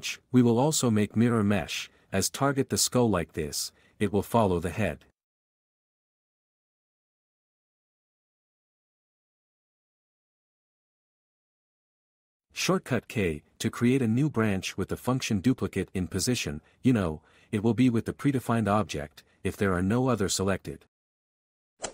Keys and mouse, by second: 0.0 Tab, 0.2 s, 0.6 q, 1.3 right click, 1.5 click, 2.6 q, 4.3 click, 5.9 r, 6.6 Escape, 6.8 click, 7.7 q, 8.2 g, 10.6 r, 11.3 g, 11.8 r, 12.6 q, 14.3 alt+q, 17.3 alt+a, 20.0-21.9 typing, 20.7 click.